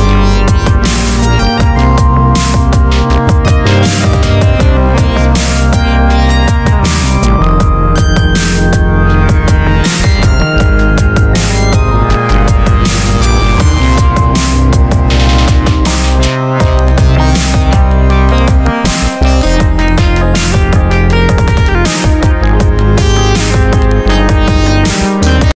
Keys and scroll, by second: 1.0 alt+z, 1.9 alt+s, 3.2 alt+z, 6.2 ctrl+e, 20.1 ctrl+1, 22.2 Tab.